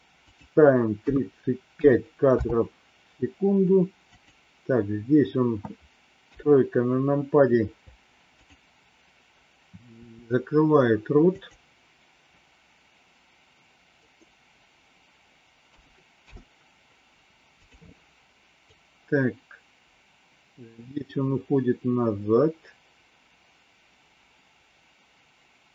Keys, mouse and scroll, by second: 0.4-2.4 drag, 4.1 click, 6.2 KP_3, 8.3 click, 10.0 r, 15.8 a, 16.1 i, 18.6-25.7 drag.